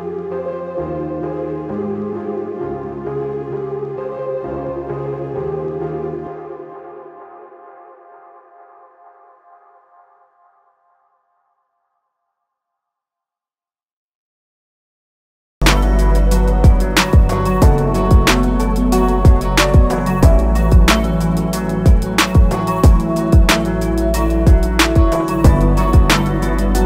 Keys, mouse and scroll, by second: 2.1 click, 7.1 Escape, 8.5 click, 13.8 ctrl+z, 14.5 click, 15.9 Escape, 17.1 click, 20.9 click, 22.8 z, 23.2 shift+click, 23.8 ctrl+z, 24.8 click.